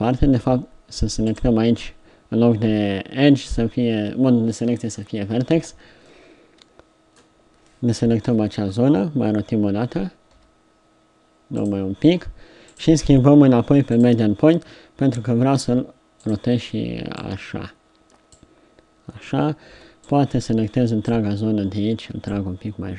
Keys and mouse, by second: 5.6 b, 8.3 KP_3, 10.3 r, 12.7-14.6 drag, 15.1 r, 16.3 click, 19.7 b.